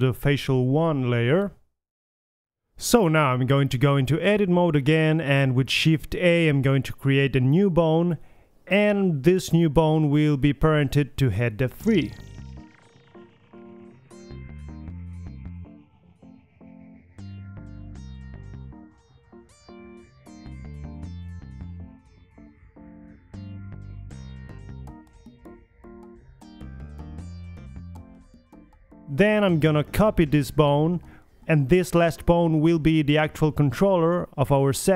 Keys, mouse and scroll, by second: 2.5 middle click, 3.5-5.3 drag, 5.4-6.9 drag, 6.9 a, 7.2 KP_3, 8.7 middle drag, 9.3 middle click, 9.8 KP_1, 10.7 Tab, 10.8 a, 13.4 shift+a, 15.2-16.7 drag, 17.2 ctrl+z, 17.6-18.8 drag, 18.4-22.0 typing, 18.9 middle click, 22.9 click, 23.4-26.2 drag, 30.0 click, 30.5 shift+d, 31.1 g, 34.1 s.